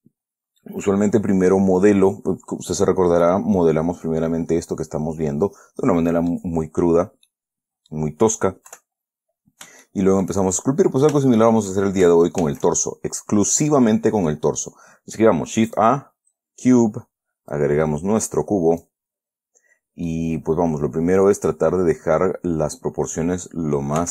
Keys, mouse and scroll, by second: 0.1-0.4 shift+scroll down 1, 0.6 scroll up 2, 3.6-6.8 middle drag, 6.8-7.6 scroll down 2, 7.6 middle click, 9.0 KP_1, 10.2 shift+middle click, 10.9 shift+scroll up 1, 11.2 scroll down 1, 11.6 shift+middle click, 12.8 shift+a, 16.0 click, 16.6-17.2 scroll down 2, 17.9-19.4 drag, 19.6 scroll up 1, 20.4-22.7 drag.